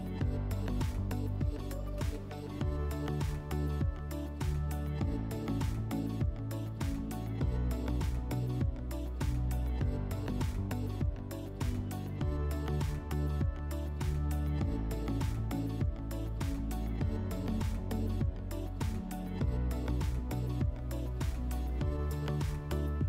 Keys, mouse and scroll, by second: 2.9 click, 4.9 click, 13.6-15.7 drag, 16.1-17.0 drag, 19.3 click, 21.1 click, 22.0 click, 22.1 click, 22.3 click, 22.4 click.